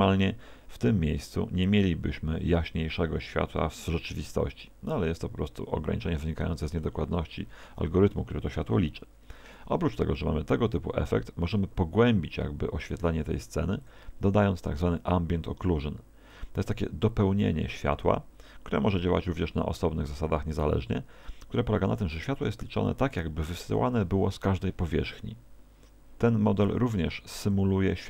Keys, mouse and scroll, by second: 10.0 Escape, 13.8 click, 27.4 click.